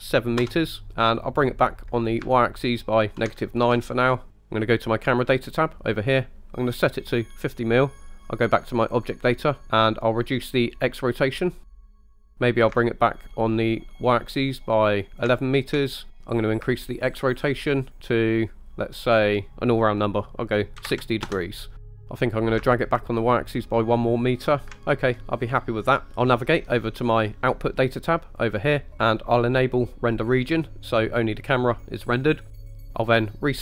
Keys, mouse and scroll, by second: 0.9-3.2 drag, 5.1 click, 9.0 click, 9.6 click, 10.3-11.8 drag, 11.9 scroll down 2, 12.2 scroll up 1, 12.6-15.4 ctrl+drag, 16.6-21.3 ctrl+drag, 22.6-24.6 ctrl+drag, 28.4 click, 30.3 click.